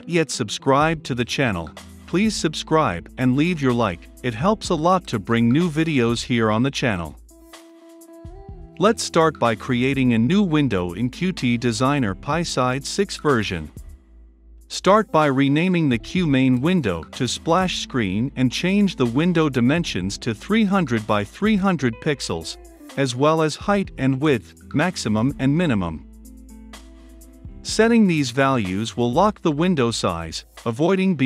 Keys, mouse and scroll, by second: 0.9-17.1 drag, 17.0-20.2 typing, 20.3 Return, 23.1-25.9 drag, 27.0-28.4 drag, 28.7-30.0 drag.